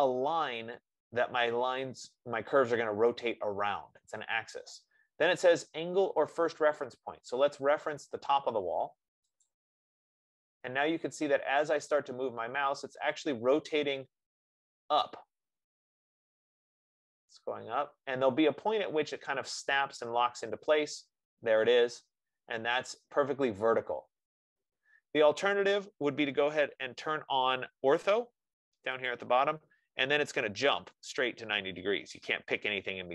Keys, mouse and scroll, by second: 9.8-14.9 drag, 28.3 F15, 29.5-33.1 drag.